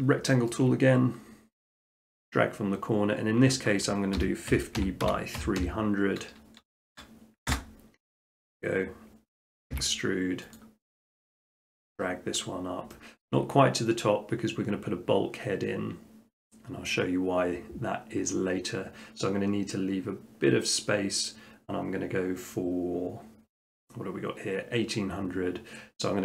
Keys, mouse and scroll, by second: 0.5 shift+middle click, 2.1 click, 4.2-5.4 typing, 7.5 Return, 9.7 e, 10.6 click, 11.5 click, 11.9 middle click, 12.1 middle click, 13.2 shift+middle click, 13.3 shift+middle click.